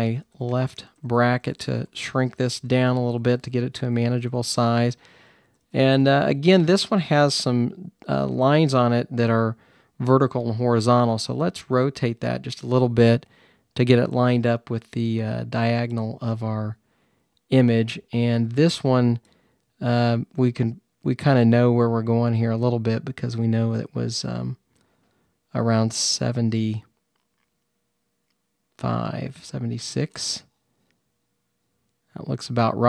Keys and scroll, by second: 0.0-4.2 typing, 5.3-6.8 typing, 9.7 typing.